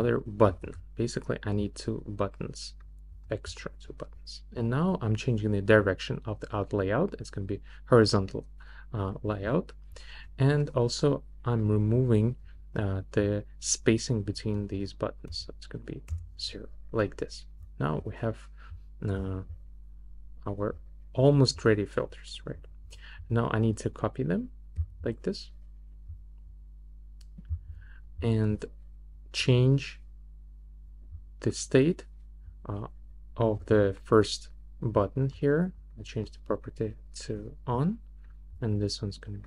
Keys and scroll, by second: 0.5 super+d, 15.2 0, 16.1 Return.